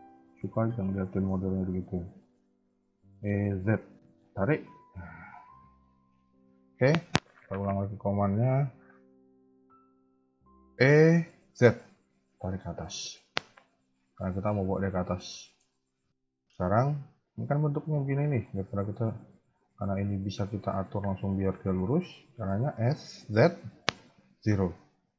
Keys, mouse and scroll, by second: 0.0 shift+middle click, 0.5-0.8 scroll up 1, 1.0 shift+middle click, 2.9 e, 5.0-5.3 scroll down 2, 5.5 shift+middle click, 6.2 ctrl+z, 7.6 g, 8.9 shift+middle click, 9.6 shift+middle click, 10.6 e, 13.0 KP_1, 13.6 KP_3, 15.3 shift+middle click, 15.6-16.0 scroll up 1, 16.2 shift+middle click, 22.5 s.